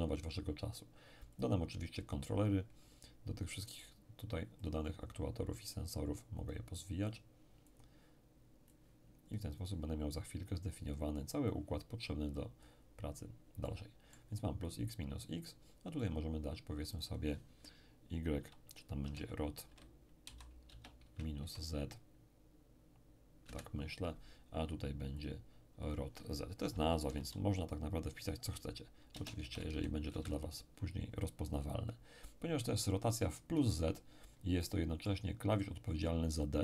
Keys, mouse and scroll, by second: 1.4-4.4 drag, 4.6-13.6 drag, 14.0-15.1 middle drag, 16.0 click, 18.8-21.4 typing, 23.4 Return, 25.2 click, 26.4-29.7 typing, 30.1 Return, 34.6-36.0 middle drag.